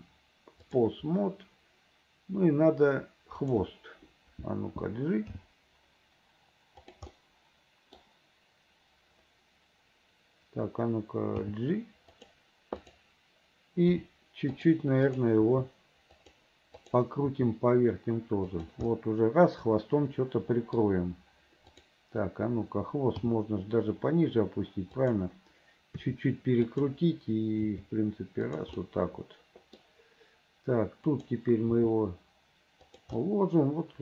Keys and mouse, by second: 3.5 middle click, 5.5 g, 7.3 middle click, 8.0 click, 11.6 g, 14.0 r, 15.2 click, 15.6 r, 17.4 r, 19.1 middle click, 19.8-20.9 middle drag, 23.3 g, 26.1 r, 27.8 g, 29.0 click, 31.3 click, 31.9 g, 33.4-34.0 drag.